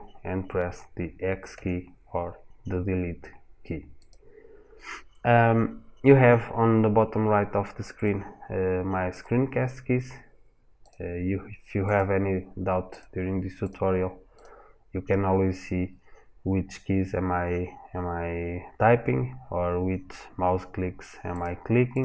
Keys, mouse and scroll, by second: 1.3 x, 7.7 click, 8.9 click, 10.6 click, 11.6 click, 12.7 click, 13.4 drag, 14.1 click, 21.1 click, 21.7 click.